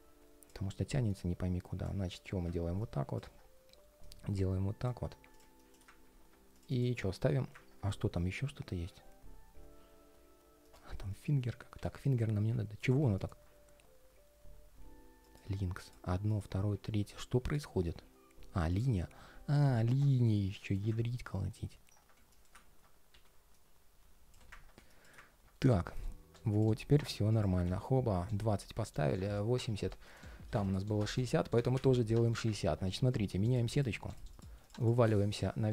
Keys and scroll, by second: 7.8 ctrl+shift+3, 25.3 ctrl+shift+3.